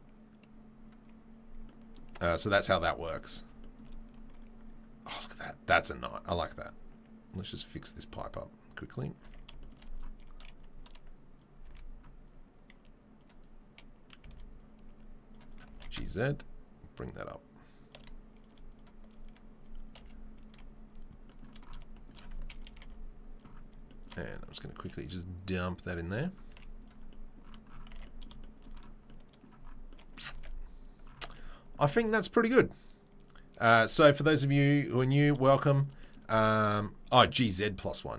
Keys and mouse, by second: 0.0-18.7 middle drag, 9.2 Tab, 11.7 c, 14.2 c, 15.7 g, 18.7 right click, 18.8-36.6 shift+middle drag, 20.0 KP_3, 20.5 KP_1, 22.7 ctrl+KP_1, 24.7 g, 26.5 z, 27.9 Tab, 30.7 ctrl+s, 33.3-38.1 drag, 36.6 shift+right click.